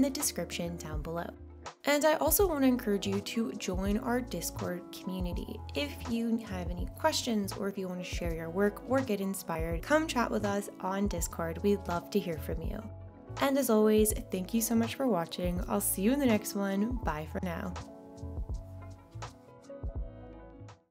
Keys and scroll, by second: 4.5-6.0 typing, 7.2 Return.